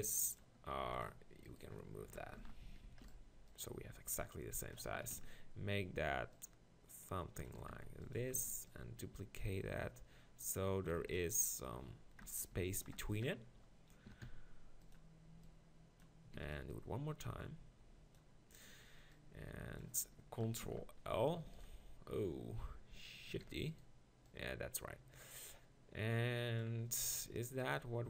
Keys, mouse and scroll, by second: 0.8 x, 1.5 click, 2.4 ctrl+l, 2.8 shift+d, 4.7 click, 5.0 s, 6.9 click, 7.5 s, 8.3 shift+d, 8.4 click, 8.7-10.5 middle drag, 10.9 x, 12.5 ctrl+l, 14.0 s, 15.4 click, 16.4 shift+d, 18.9 b, 20.7 ctrl+l, 21.5 shift+f, 23.4 shift+d, 24.3-26.1 drag.